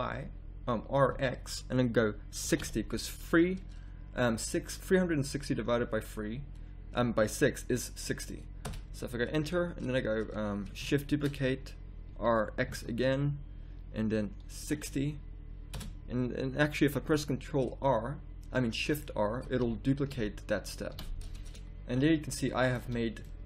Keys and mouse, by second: 11.1 shift+d, 19.6 shift+r, 20.1 shift+r, 20.9 shift+r, 22.8 a.